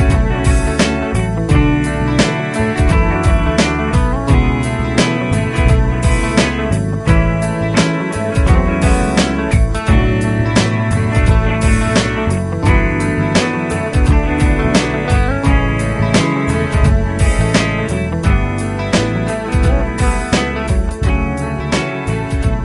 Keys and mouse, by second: 0.6 shift+click, 2.8 ctrl+Down, 3.1 ctrl+Down, 3.6 ctrl+Down.